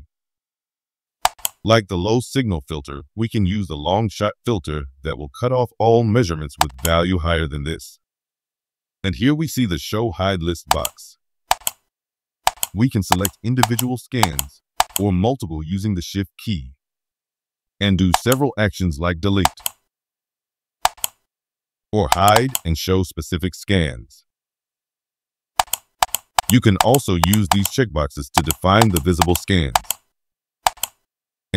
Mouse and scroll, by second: 1.2 click, 6.6 click, 10.6 click, 11.4 click, 12.4 click, 13.0 click, 13.6 click, 14.2 click, 14.7 click, 18.1 click, 19.4 right click, 20.8 click, 22.0 click, 22.3 right click, 25.5 click, 26.0 click, 26.3 click, 26.7 click, 27.2 click, 27.4 click, 28.3 click, 28.8 click, 29.2 click, 29.7 click, 30.6 click.